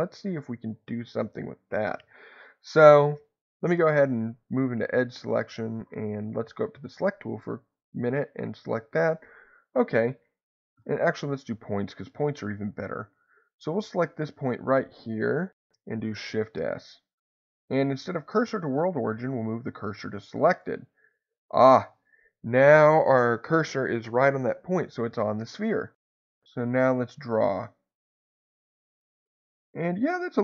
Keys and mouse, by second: 6.5 click, 8.0 click, 16.0 shift+s, 26.2 click, 27.2-29.2 drag, 29.4-30.4 middle drag.